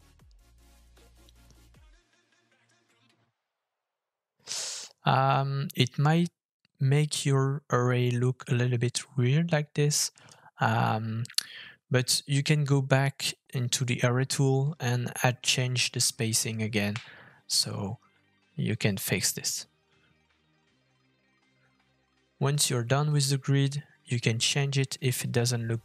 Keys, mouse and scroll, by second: 3.8 Tab, 6.8 shift+middle click, 16.9 g.